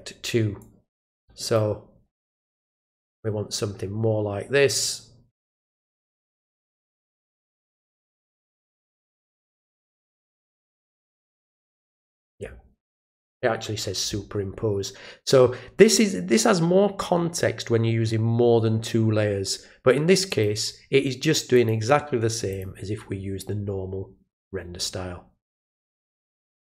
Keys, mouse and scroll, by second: 0.6 click, 2.8-5.8 drag, 6.1 click, 7.5 click, 9.5 click, 20.3 click, 21.5 click, 22.5 click, 26.3 click.